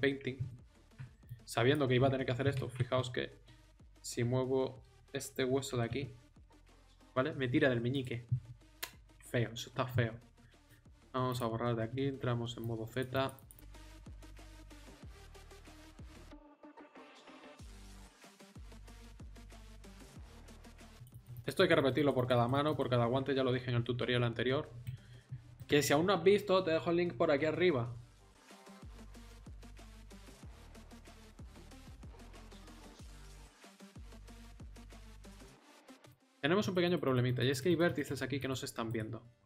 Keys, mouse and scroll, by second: 1.2-2.6 drag, 2.6 ctrl+z, 5.6 r, 9.1-12.0 middle drag, 12.0 z, 14.6-15.8 middle drag, 15.8 click, 16.4 middle click, 16.6 middle click, 17.4 right click, 17.6 click, 18.2-20.2 middle drag, 24.1 click, 24.6-27.8 middle drag, 27.9 middle click, 28.5 click, 29.9 right click, 30.6 click, 32.5 right click, 32.8 KP_7, 33.4-38.9 drag, 38.9 middle click.